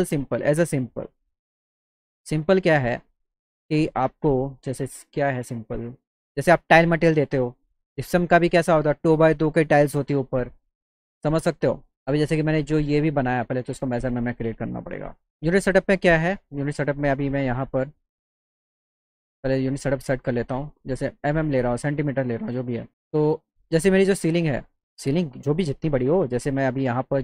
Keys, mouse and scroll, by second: 2.7 click, 5.3 click, 5.8 click, 6.6 click, 7.1 click, 8.6 click, 9.8-11.9 drag, 12.1 click, 14.2 click, 15.8 click, 18.9 click, 19.6 click, 20.4 click, 20.9 click, 21.5 click, 22.1 click, 23.2 click, 24.3-26.2 drag, 26.7 click, 26.9 right click.